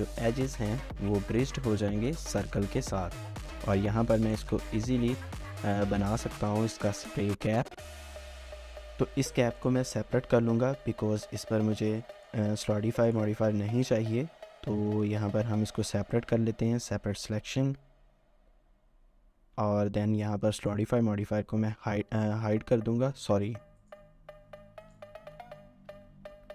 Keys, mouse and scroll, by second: 0.4 scroll down 1, 0.7 middle click, 3.2 1, 3.5 alt+click, 3.8 alt+scroll down 1, 4.1 middle click, 5.0 scroll up 1, 6.6 scroll down 1, 7.0 shift+middle click, 8.0 scroll down 2, 8.1 shift+middle click, 8.6 scroll down 1, 11.3 typing, 12.6 Tab, 13.3 typing, 17.0 Tab, 17.6 typing, 19.4 Tab, 20.1 typing, 25.0-26.5 typing.